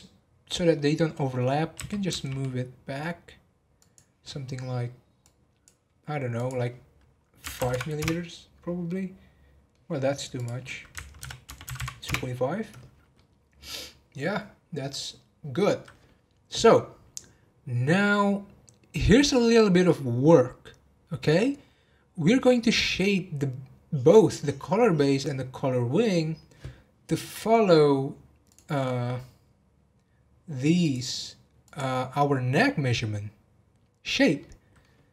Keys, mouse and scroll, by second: 1.7 g, 6.3-7.7 drag, 7.7 m, 8.8-10.3 middle drag, 10.3-11.7 drag, 11.7 m, 13.1-14.3 middle drag, 14.3-14.9 scroll down 1, 14.9-18.0 middle drag, 27.6 scroll down 3, 28.3 scroll down 2, 28.5 click, 29.1-29.6 scroll up 2, 30.8 click, 31.6 click, 34.3-35.1 middle drag.